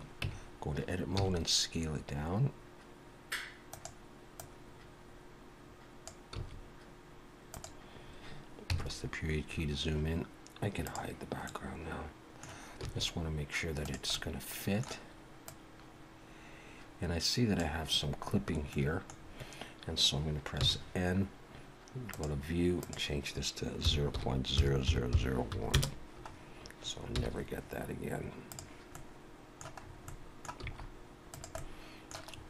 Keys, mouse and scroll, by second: 0.3 Tab, 1.2 s, 4.4 click, 6.3 s, 8.7 KP_Decimal, 9.5 scroll down 4, 10.8 click, 11.4 middle click, 12.8 s, 14.1 middle click, 15.5 click, 18.2-18.7 scroll down 4, 18.7 middle click, 19.2-19.5 scroll down 1, 20.6 n, 22.1 click, 22.8 click, 24.9 0, 27.2 n, 28.5 click, 28.9 middle click, 29.8-30.4 scroll up 3, 30.1 middle click, 30.6 s, 31.6 middle click, 32.3-32.4 scroll up 2.